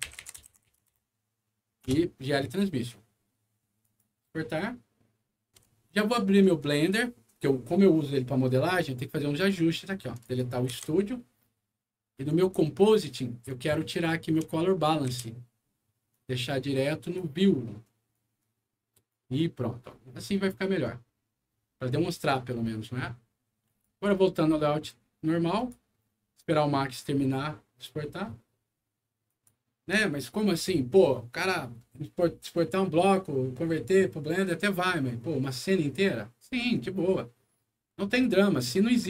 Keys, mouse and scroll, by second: 0.0-1.3 typing, 1.8 Return, 3.7 click, 6.5 click, 10.1 click, 10.6 Delete, 12.2 click, 13.4 click, 14.2 click, 15.0 Delete, 16.0-17.1 drag, 18.0 click, 23.6 click, 25.5 click, 29.2 click.